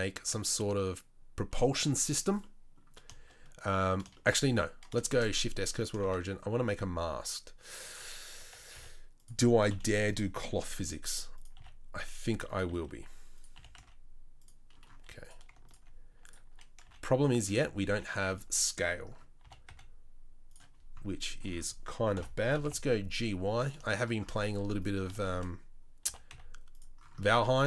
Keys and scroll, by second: 5.1 shift+s, 6.0 shift+a, 8.3 Tab, 8.7 s, 9.7 KP_3, 10.8 g, 11.5 s, 12.7 s, 13.5 s, 16.8 z, 17.9 1, 19.4 g, 22.1 ctrl+l, 22.4 g, 26.0 g.